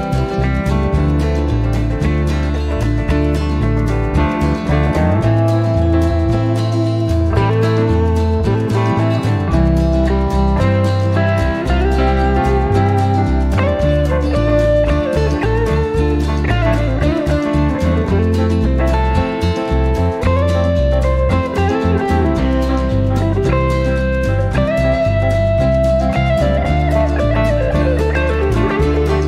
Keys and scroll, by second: 2.6 0, 18.8 typing, 21.7 typing, 23.4 0.